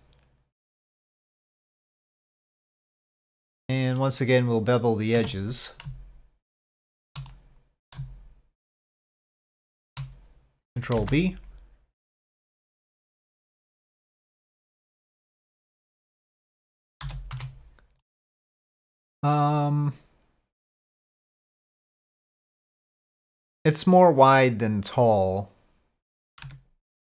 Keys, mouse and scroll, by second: 2.6-4.0 middle drag, 5.2 2, 5.3 click, 6.7 shift+click, 7.3 middle click, 9.4 shift+click, 11.0 ctrl+b, 15.8 click, 17.0 z, 18.2-26.1 drag, 26.5 Tab.